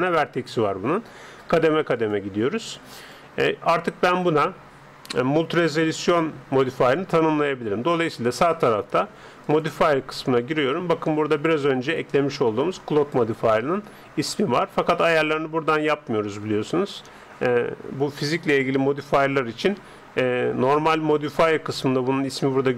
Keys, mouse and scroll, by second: 2.1-4.7 drag, 9.5-11.2 drag, 12.8-14.5 drag.